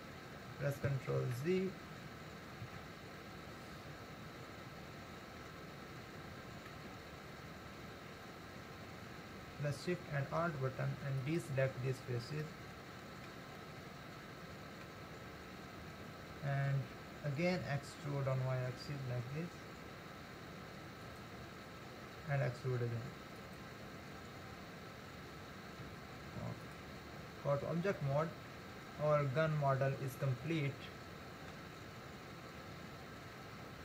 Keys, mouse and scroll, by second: 1.8 ctrl+z, 3.2 ctrl+z, 7.0 ctrl+z, 7.7-10.7 scroll up 1, 11.2 alt+shift+click, 12.4 alt+shift+middle click, 13.6-15.3 middle drag, 15.3-15.6 scroll up 2, 18.1 e, 22.6 e, 25.8 Tab, 27.4-28.0 scroll down 5, 28.0-31.1 middle drag, 32.6-33.4 scroll down 2, 33.4-33.8 middle drag.